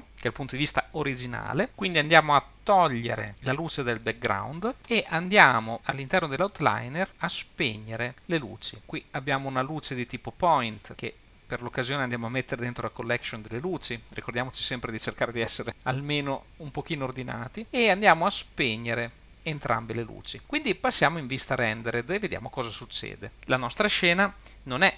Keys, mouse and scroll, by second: 3.3 click, 6.9-8.3 scroll down 3, 10.3 click, 10.9 click, 18.6 click, 19.2 click.